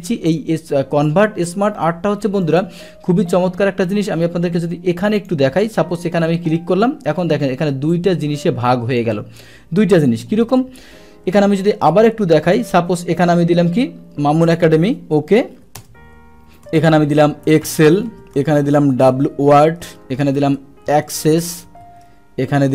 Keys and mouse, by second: 2.4 click, 5.2 click, 7.9-9.0 drag, 10.4 ctrl+z, 11.3 ctrl+z, 13.2 click, 14.6 click, 15.6 Right, 15.8 Return, 18.1 Return, 19.8 Return.